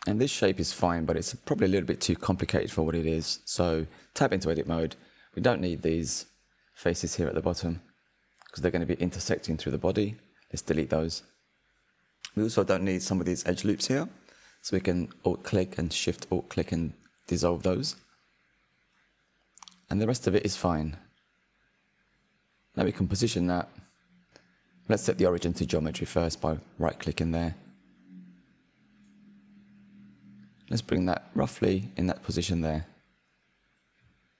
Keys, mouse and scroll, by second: 1.3 Tab, 1.9-3.5 shift+middle drag, 3.5-3.9 scroll up 4, 3.9-4.9 shift+middle drag, 4.9 Tab, 5.3 scroll up 2, 5.8-7.3 middle drag, 7.3 alt+click, 9.8 alt+shift+click, 10.5-12.8 middle drag, 12.8 Delete, 14.2-16.3 middle drag, 16.3-17.6 drag, 18.3 alt+shift+click, 20.3 ctrl+Delete, 21.5-23.5 middle drag, 23.5 Tab, 24.2-24.7 scroll down 4, 24.7-26.5 middle drag, 26.5-29.2 right drag, 29.2-31.3 middle drag, 31.3 KP_1, 32.0-33.0 shift+middle drag, 33.0 click.